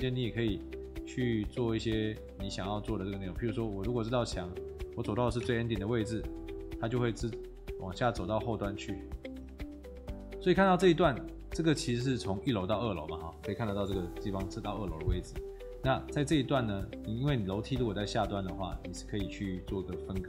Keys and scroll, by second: 1.1 Escape, 5.4 Delete, 9.5 F1.